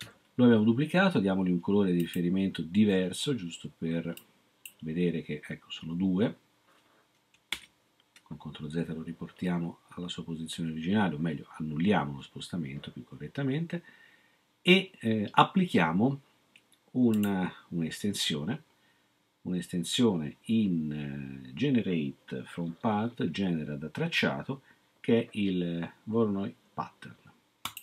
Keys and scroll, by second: 7.5 ctrl+z.